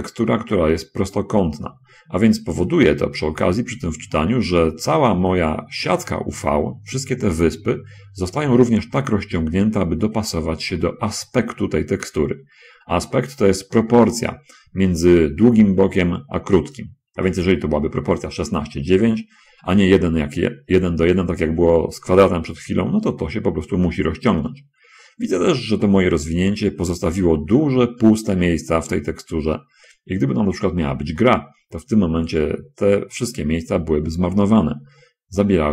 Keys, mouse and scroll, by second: 8.1 middle click.